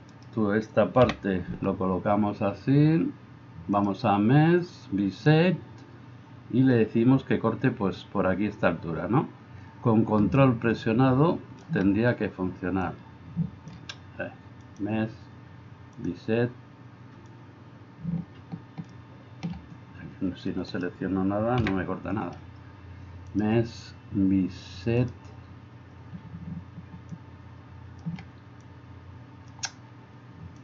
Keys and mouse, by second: 0.2 middle click, 0.2 right click, 20.8-26.2 middle drag, 20.8-26.2 right drag.